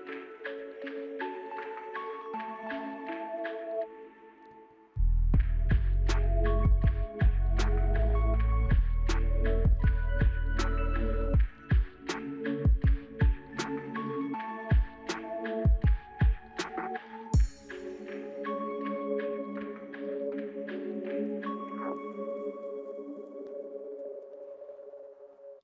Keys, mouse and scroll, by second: 0.1 double click, 12.1 middle click, 12.6 scroll down 3, 12.7 scroll up 1, 13.0 middle click, 13.0 middle click, 14.3 right click, 18.1 scroll down 2, 18.4 middle click, 18.4 middle click, 20.2-21.2 scroll up 9, 21.2 middle click, 22.6 k, 22.6 a, 23.9 scroll down 1, 24.2 middle click.